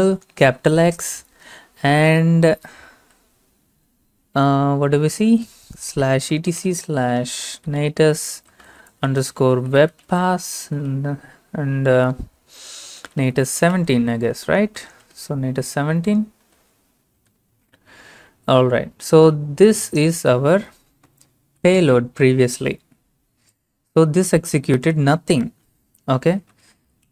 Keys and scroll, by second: 0.4 typing, 2.7 typing, 5.4-11.1 typing, 12.8-17.6 typing, 21.5-22.1 typing, 24.9 typing, 26.6-27.1 typing.